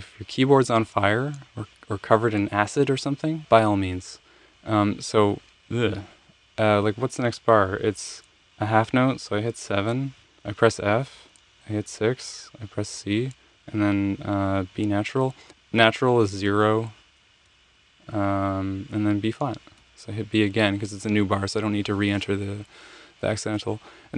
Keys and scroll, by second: 10.1 7, 11.1 f, 12.1 6, 13.0 c, 16.4 0, 17.4 b, 19.8 b, 23.3 Return.